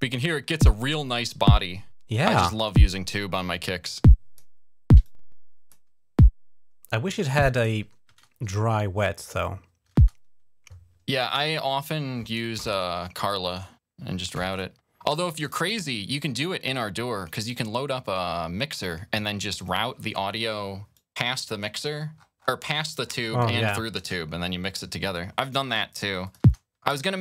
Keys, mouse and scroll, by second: 3.3 click, 4.8 click, 6.9 click, 7.3 click, 7.9 space, 9.0 click, 9.7 typing, 11.0 typing, 11.3 right click, 14.3 click, 15.2 click, 15.4 click, 16.5 click, 19.3 click, 20.7 click, 21.7-23.4 scroll up 13, 23.9 space, 24.9 click, 26.0 click, 26.2 space.